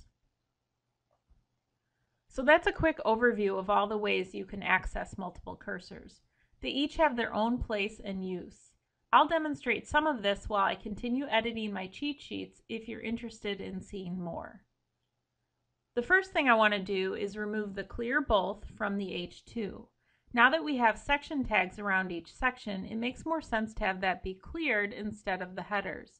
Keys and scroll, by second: 2.3 ctrl+z, 13.5 Escape, 15.5 ctrl+Home.